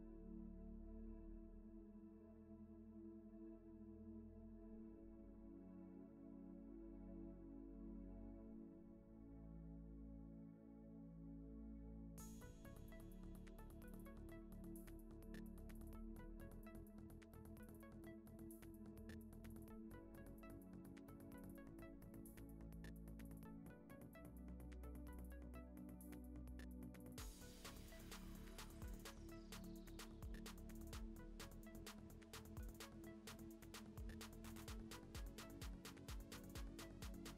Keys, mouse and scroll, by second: 0.0 middle click, 0.3 Tab, 0.4 a, 0.8 Tab, 0.9 middle click, 2.0-5.5 typing, 3.5 shift+middle drag, 6.7 alt+d, 7.1 r, 7.7 middle click, 7.9 g, 9.2 middle click, 9.5 r, 10.1 r, 10.3 s, 10.9 middle click, 11.0 scroll down 2, 11.3 alt+d, 12.2 middle click, 12.4 g, 13.3 r, 13.7 middle click, 14.0 r, 14.3 middle click, 14.5 s, 15.3 shift+middle click, 15.5 alt+d, 16.1 click, 16.5 g, 17.0 middle click, 17.3 s, 17.5 middle click, 17.7 r, 18.4 middle click, 19.4 s, 19.9 g, 20.2 middle click, 20.4 g, 20.6 middle click, 21.5 click, 21.6 middle click, 22.0 r, 22.4 r, 23.0 s, 23.4 middle click, 23.7 r, 24.2 middle click, 24.7 alt+d, 25.1 s, 26.0-26.7 middle drag, 26.9-27.2 shift+middle drag, 27.2 click, 27.3 r, 28.1-28.8 middle drag, 28.8 click, 28.9 r, 29.6 ctrl+s, 29.8 scroll down 4, 30.2 middle drag, 30.3 shift+a, 31.5 alt+r, 31.7 g, 32.0 g, 32.5 r, 33.3 KP_0, 33.9 click, 34.1 click, 34.4-36.0 typing.